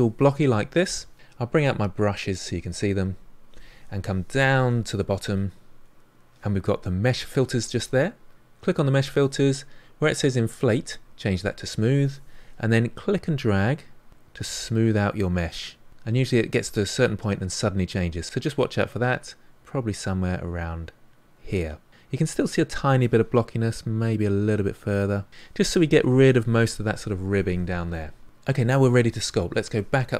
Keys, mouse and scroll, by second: 2.1-13.2 drag, 23.9 click.